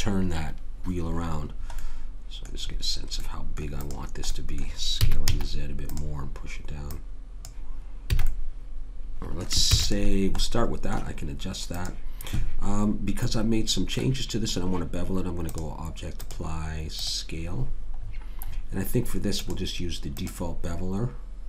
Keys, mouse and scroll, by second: 2.0-3.2 middle drag, 3.8 click, 5.0 s, 6.9 click, 8.1 a, 9.6 ctrl+s, 11.7 click, 13.5 middle click, 17.0 click, 18.0-19.4 middle drag, 19.4 click.